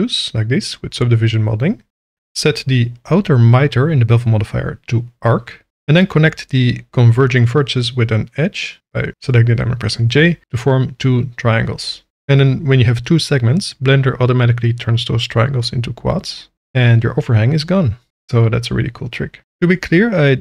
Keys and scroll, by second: 4.0 Tab, 5.2 1, 7.1 j, 7.7 Tab, 12.2 j, 13.2 Tab, 14.2 alt+a, 16.8 j, 17.7 Tab, 18.8 alt+a, 20.0 shift+d.